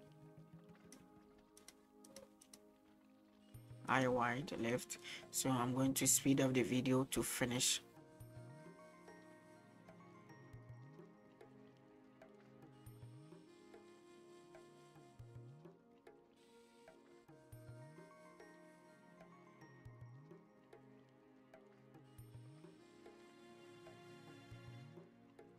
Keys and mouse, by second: 1.7-4.9 drag, 6.5 middle click, 7.7-8.2 drag, 8.3 click, 8.6 middle click, 8.6 middle click, 8.8 KP_1, 8.9 shift+middle click, 9.0 click, 9.3 click, 9.4 click, 9.7 middle click, 9.8 drag, 10.1 click, 10.4 middle click, 10.5 click, 10.6 click, 10.9 middle click, 11.0 click, 11.3 click, 11.6 middle click, 11.7 click, 12.0 click, 12.3 middle click, 12.4 click, 12.7 click, 13.0 middle click, 13.1 click, 13.4 click, 13.7 middle click, 13.8 click, 14.0 click, 14.4 middle click, 14.5 click, 14.8 click, 15.1 middle click, 15.2 click, 15.5 shift+middle click, 15.5 click, 15.9 middle click, 16.0 click, 16.5 middle click, 16.5 click, 16.7 click, 17.1 click, 17.3 middle click, 17.6 click, 17.9 click, 18.0 middle click, 18.0 click, 18.2 click, 18.6 click, 18.8 middle click, 18.8 click, 19.1 click, 19.4 click, 19.6 click, 19.9 middle click, 20.0 click, 20.3 click, 20.6 click, 20.7 middle click, 20.8 click, 21.0 click, 21.3 middle click, 21.4 click, 21.7 click, 22.2 middle click, 22.3 click, 22.6 click, 23.0 middle click, 23.0 click, 23.4 click, 23.7 middle click, 23.8 click, 23.9 middle click, 24.0 click, 24.2 click, 24.5 middle click, 24.5 click, 24.7 click, 25.0 click, 25.3 click.